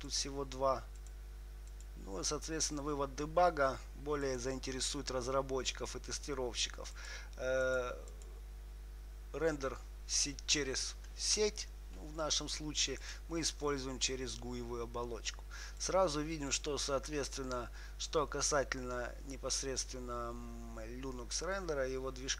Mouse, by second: 4.6-6.4 drag, 7.3-10.2 drag, 13.3-15.3 drag, 16.1-18.5 drag.